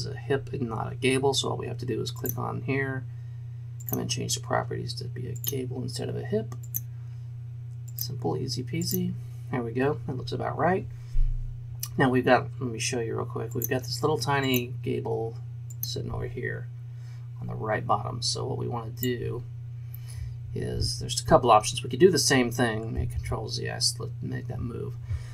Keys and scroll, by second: 23.2 ctrl+z.